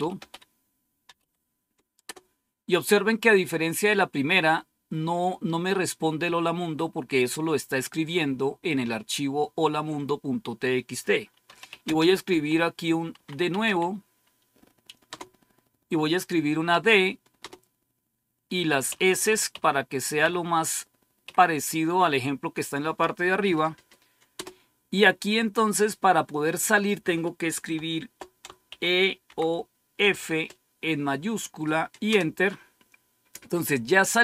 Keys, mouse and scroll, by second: 0.0-2.0 typing, 11.2-15.0 typing, 16.6-17.3 typing, 18.8-21.6 typing, 24.2 Return, 28.6-29.9 typing, 32.0 Return.